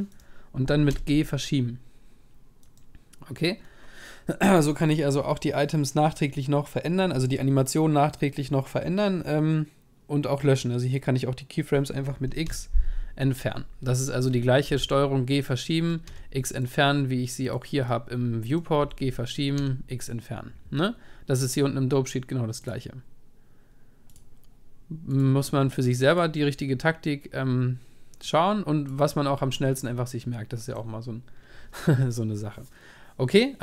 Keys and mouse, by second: 0.9 g, 12.4 x, 14.7 g, 16.0 x, 17.9-22.0 right drag, 18.8 g, 19.5 x, 22.6-24.9 drag, 25.1-27.0 drag, 28.3-30.2 drag, 30.2-31.7 middle drag.